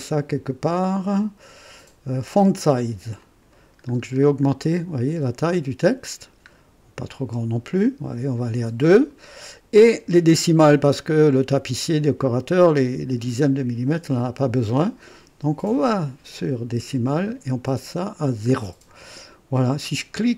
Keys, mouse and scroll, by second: 3.2 click, 3.9 scroll up 1, 4.6 scroll down 1, 6.5 scroll down 1, 15.5-16.2 drag, 17.0 click, 17.7-18.3 scroll down 2.